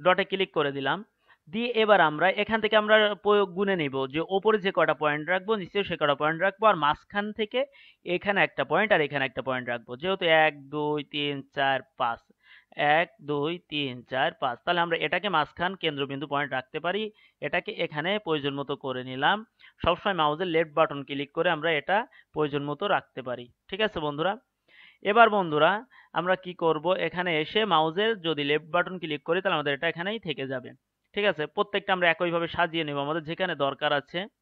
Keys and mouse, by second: 0.0-16.7 right drag, 20.4-26.7 right drag, 31.3-33.0 right drag.